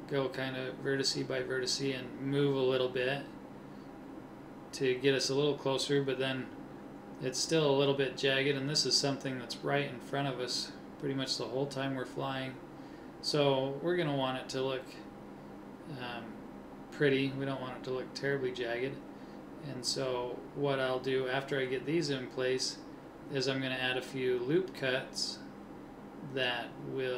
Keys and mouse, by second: 3.0 g, 4.6 a, 5.3 c, 6.6 g, 12.1 middle click, 13.1 a, 13.2 c, 14.4 g, 17.1 a, 17.3 c, 18.0 click, 18.6 g, 20.7 a, 20.8 c, 21.6-23.8 drag, 22.2 g, 24.3 a, 24.4 c, 25.0 click, 25.6 click, 25.6 g.